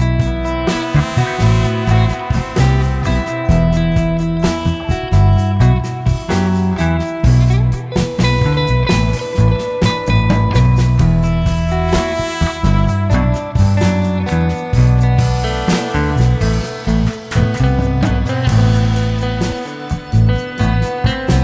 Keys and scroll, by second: 1.3 Escape, 1.5 Escape, 1.6 Escape, 3.1 m, 3.2 space, 6.4 Escape, 8.0 Escape, 10.5 m, 10.6 space, 11.4 Escape, 11.6 Escape, 12.8 Escape, 14.6 Escape, 15.4 Escape, 18.0 m, 18.1 space, 19.1 Escape.